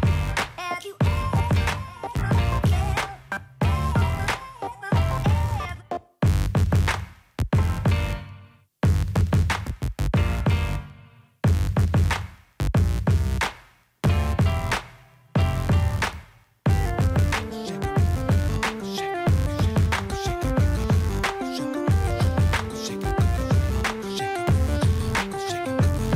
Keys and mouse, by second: 0.0 middle click, 0.3 click, 1.2 ctrl+v, 1.2 click, 1.4 middle drag, 2.0 right click, 3.0 ctrl+v, 3.4 click, 3.7 middle click, 4.2 click, 4.3 middle click, 4.5 r, 9.8 click, 10.7 middle click, 11.0 click, 12.0 shift+click, 13.0 click, 13.8-14.9 shift+drag, 15.9 click, 16.4 shift+click, 17.2 middle click, 17.5 right click, 18.2 shift+click, 19.6 right click, 19.9 middle click, 20.2 right click, 20.9 click, 22.1 ctrl+c, 23.3 ctrl+v, 23.7 middle click, 24.6 ctrl+v, 25.7 right click, 26.0 right click.